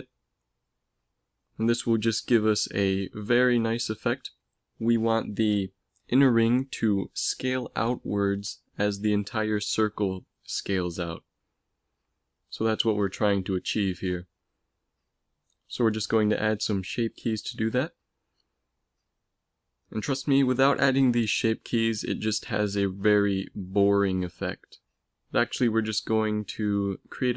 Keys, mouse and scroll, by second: 4.6 middle click, 5.9 Tab, 10.7-12.5 middle drag, 12.5-15.7 drag, 15.7 middle click, 18.1 ctrl+s, 21.9 shift+s, 24.8 x, 25.5 shift+a.